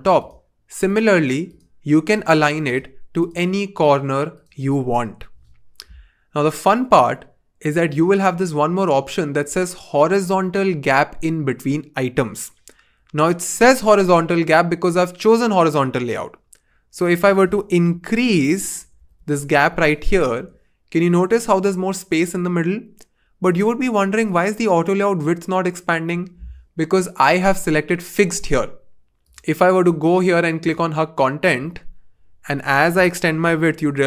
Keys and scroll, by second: 17.9 shift+Up, 18.2 shift+Up, 18.3 shift+Up, 33.4 shift+Up, 33.5 shift+Up, 33.7 shift+Up.